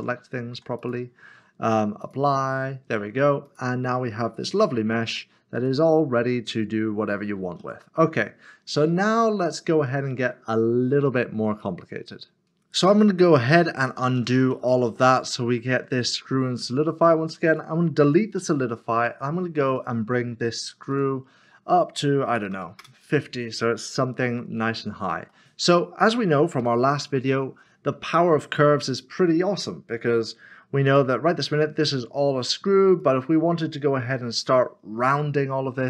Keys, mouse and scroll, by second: 0.8 click, 4.9 middle click, 5.9-6.3 scroll up 1, 6.3 middle click, 7.6 alt+z, 8.0-8.8 scroll down 1, 8.8 middle click, 12.4 double click, 13.0 middle click, 13.7 ctrl+z, 17.5 click, 19.8 click, 22.4 typing, 25.3 middle click, 26.6 typing, 27.6 scroll up 1, 28.1 shift+middle click, 29.7 middle click, 30.9 Tab, 31.8 shift+middle click, 33.0 shift+middle click.